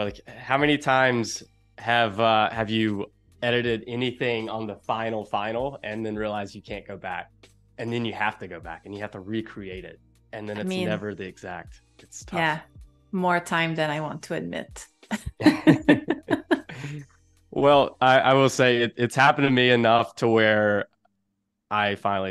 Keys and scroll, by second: 0.4 space.